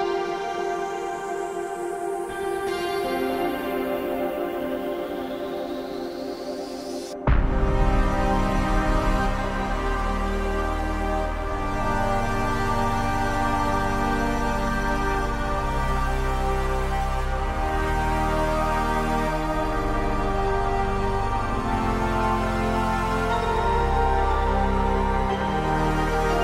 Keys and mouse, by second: 0.6 middle click, 11.5 drag, 12.0-13.0 middle drag, 13.5-14.1 middle drag, 15.8 ctrl+click, 19.7 shift+middle click, 20.3 middle click, 20.8 right click, 21.1 middle click, 26.3-26.4 middle drag.